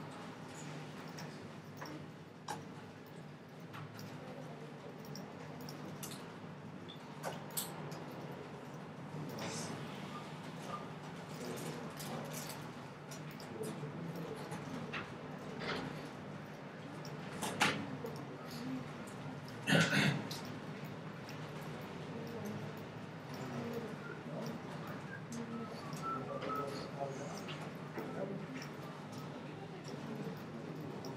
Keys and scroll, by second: 4.4 super+c, 5.2 shift+super+c, 6.3 shift+super+v, 6.9 super+v, 12.6 shift+super+v.